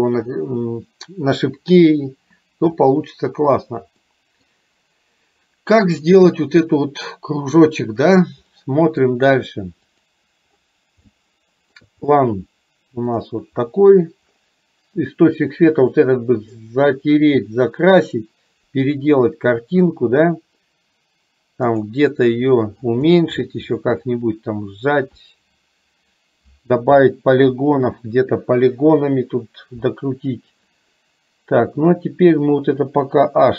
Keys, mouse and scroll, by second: 4.1 middle click, 8.6-9.1 middle drag, 11.3 shift+middle click, 21.8 click.